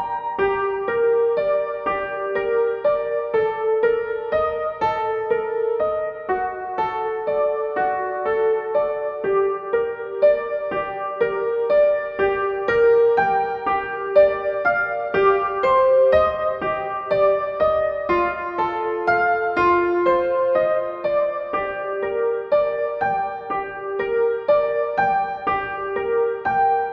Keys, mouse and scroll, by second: 0.3-5.5 drag, 6.8-10.8 drag, 10.8-15.8 alt+shift+drag, 17.1 Up, 18.6 Down, 19.6-21.1 drag.